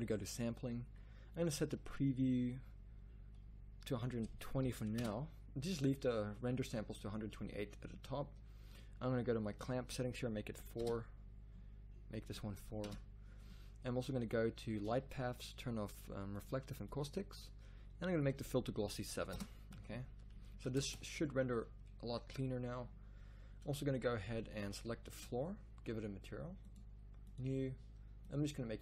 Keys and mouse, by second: 14.8-19.8 middle drag, 21.0 shift+z, 24.6 z.